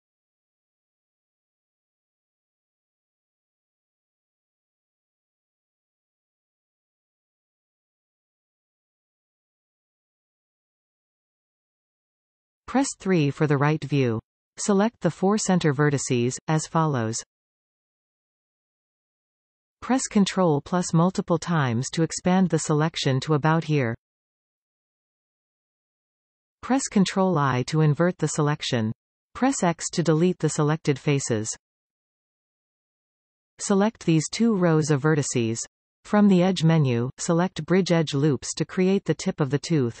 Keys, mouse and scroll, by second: 1.2-1.8 scroll up 2, 2.3-3.4 scroll up 2, 3.4-4.2 scroll up 1, 4.2 alt+shift+click, 4.8 x, 5.8-12.0 middle drag, 5.8 scroll down 2, 6.8-7.3 scroll down 2, 12.0 KP_5, 13.4 KP_3, 14.5-15.4 scroll up 1, 15.9 b, 19.8 ctrl+KP_Add, 26.5 ctrl+i, 29.8 x, 30.5-36.3 middle drag, 35.2-36.3 scroll up 2, 36.3 alt+shift+click, 37.1-38.6 middle drag, 38.6 alt+shift+click, 39.1 scroll down 2, 39.3-40.0 middle drag.